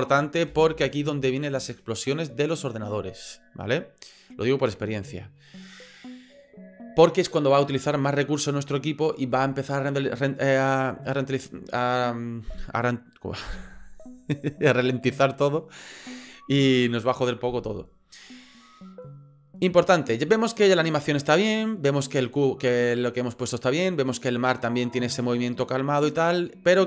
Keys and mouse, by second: 0.6 space, 20.3-22.0 drag, 24.7-26.8 drag.